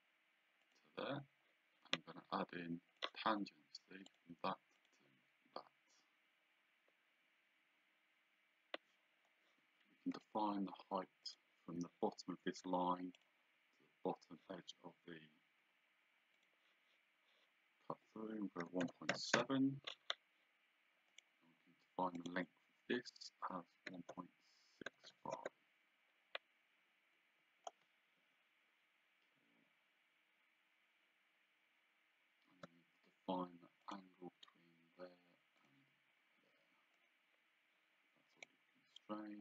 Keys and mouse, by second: 0.7 click, 3.0 click, 4.1 click, 10.2 d, 11.3 click, 13.2 click, 16.4 click, 18.7 KP_1, 18.9 KP_Decimal, 19.2 KP_7, 19.4 KP_Enter, 21.2 click, 22.2 click, 23.9 KP_1, 25.4 KP_Enter, 28.3 Escape, 32.7 d, 33.9 click, 35.7 click, 37.1 click, 38.4 click.